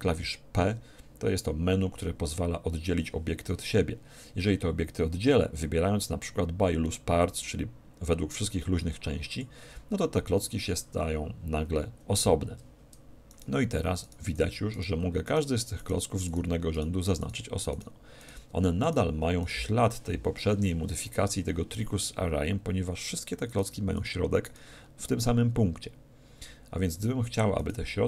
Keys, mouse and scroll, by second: 0.5 p, 12.5 Tab, 13.3-21.1 right drag, 14.4 z, 23.4-26.1 right drag, 26.9-28.0 right drag.